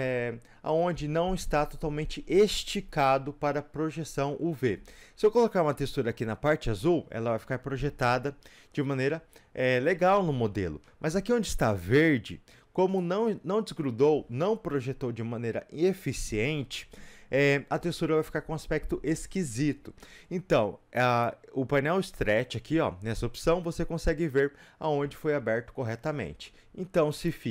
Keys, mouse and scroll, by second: 12.9 click, 13.3-27.5 middle drag, 27.2 ctrl+e.